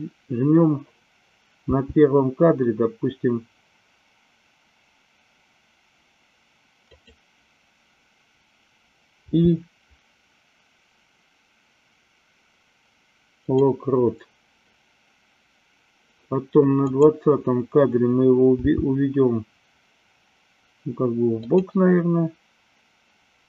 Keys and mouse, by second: 1.6 g, 7.0 click, 16.8 click, 18.5 g.